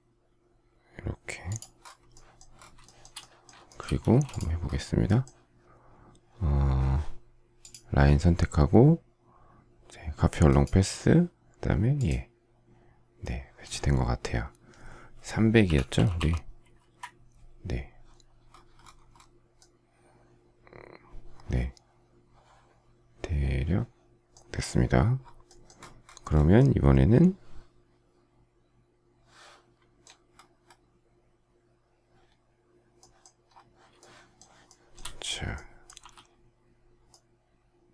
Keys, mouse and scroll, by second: 2.8 shift+middle click, 3.6 shift+middle click, 4.0 space, 15.4-16.7 typing, 16.8 Return, 33.9 shift+middle click, 34.6 shift+middle click, 36.0 k.